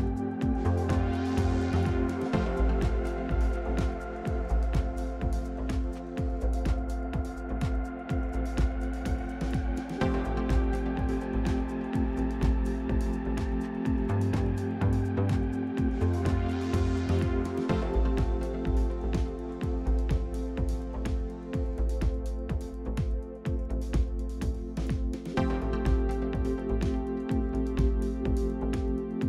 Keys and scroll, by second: 0.9-2.2 typing, 3.4 Return.